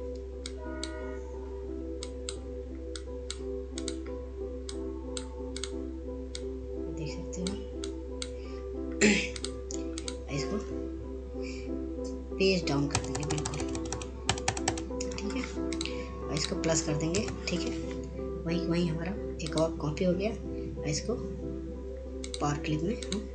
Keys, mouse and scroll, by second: 0.9-13.8 drag, 16.2 ctrl+Page_Down, 19.1 click, 22.9 click.